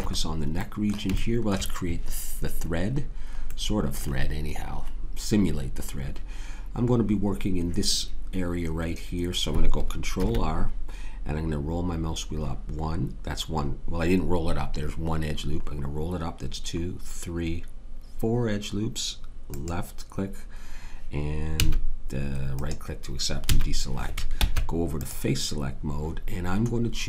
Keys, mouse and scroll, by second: 6.5-10.2 middle drag, 10.2 ctrl+r, 23.4 a, 24.3 ctrl+Tab.